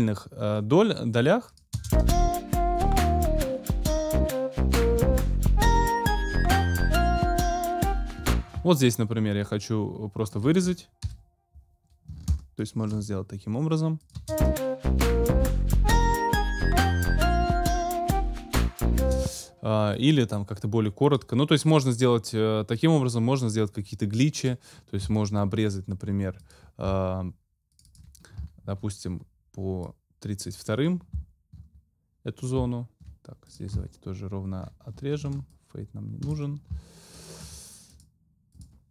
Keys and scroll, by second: 1.7 space, 8.2 space, 11.0 super+Delete, 14.1 space, 19.0 space.